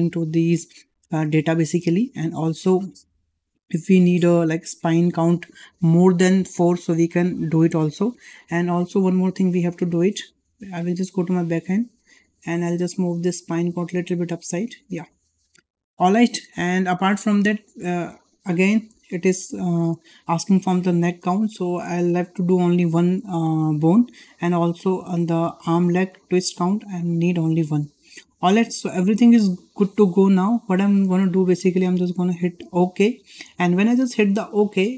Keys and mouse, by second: 8.7 `, 10.0 `, 12.0-12.4 drag, 12.9 click, 13.1 click, 14.1 `, 18.9 shift+middle drag, 34.4-34.9 drag.